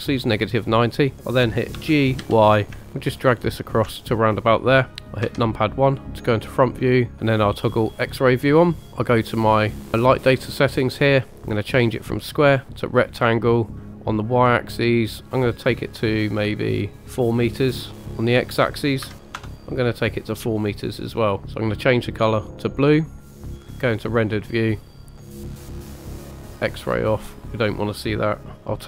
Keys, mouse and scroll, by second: 1.7 g, 2.2 y, 3.6 ctrl+click, 5.2 KP_1, 7.1 click, 8.0 click, 8.5-8.8 scroll up 2, 8.8 shift+middle click, 9.6 click, 11.3-12.5 drag, 13.8-16.4 drag, 16.9 click, 18.2-19.8 drag, 20.6 scroll down 2, 22.1 click, 23.7 KP_0, 24.7 click, 25.4 click, 27.5-28.8 drag, 28.5-28.8 scroll up 1.